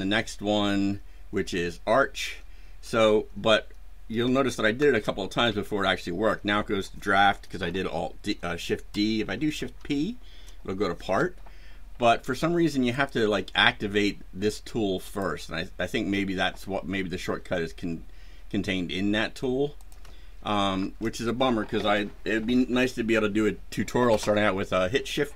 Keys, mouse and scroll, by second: 4.7 shift+d, 9.5 shift+p, 12.9 click, 15.0 click, 19.7 shift+click, 20.7 shift+d.